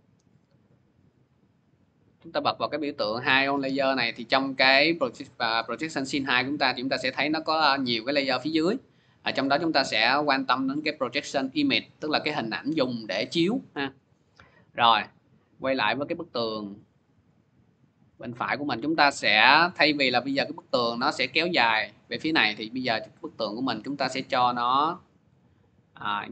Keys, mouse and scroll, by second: 1.0 click, 4.7 click, 6.2 scroll, 8.0 click, 8.4 click, 9.8 click, 12.1 click, 12.6 click, 14.5 click, 18.6 click, 20.4 click, 20.8 middle click, 22.4 middle click, 22.5 middle click, 25.4 scroll, 26.1 scroll.